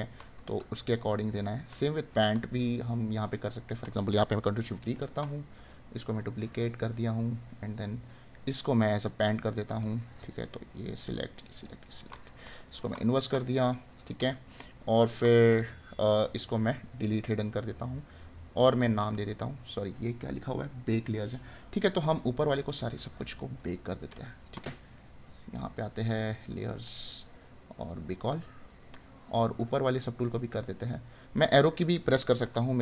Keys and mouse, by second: 0.4 right click, 8.9 right click, 12.2 right click, 28.5 right click.